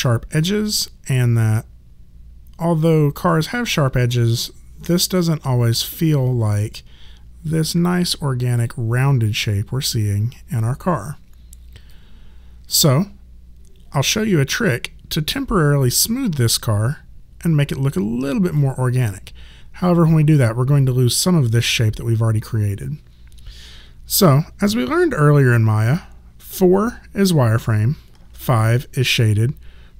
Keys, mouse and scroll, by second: 8.6 click, 11.9 click, 18.0 click, 26.5 4, 28.2 5.